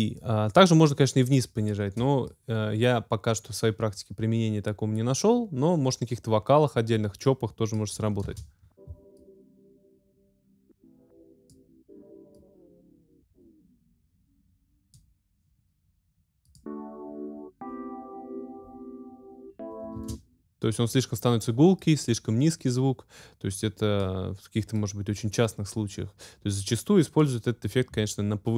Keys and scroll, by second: 8.3 space, 20.0 space.